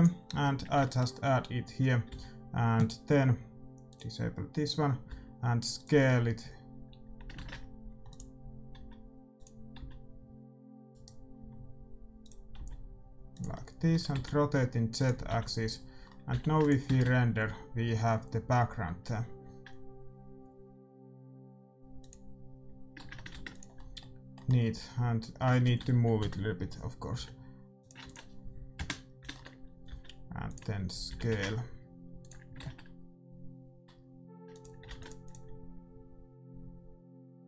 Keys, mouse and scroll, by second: 0.0 click, 0.5 middle click, 2.0 s, 5.0 s, 8.0 ctrl+z, 8.2-9.8 drag, 8.7 s, 9.7 s, 11.3 s, 12.5 s, 13.5-15.4 middle drag, 13.9 r, 15.2 g, 16.0-18.6 middle drag, 16.3 g, 18.6 shift+z, 22.4-23.8 drag, 23.3 ctrl+s, 23.3 shift+z, 26.1 KP_7, 27.1 g, 28.0 ctrl+s, 28.7 KP_0, 29.2 middle click, 29.8 s, 31.0 g, 34.2 shift+z, 34.5-37.4 drag, 34.8 ctrl+s.